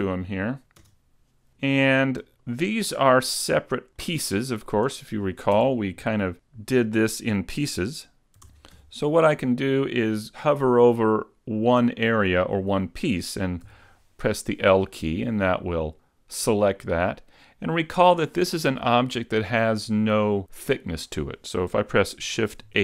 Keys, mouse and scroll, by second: 0.6 KP_Decimal, 0.9 KP_Decimal, 1.7 shift+middle click, 4.2 click, 5.6 Tab, 6.0 middle click, 8.5 ctrl+Tab, 13.7 l, 15.5 middle click, 17.4-19.6 scroll up 3, 22.7 shift+h.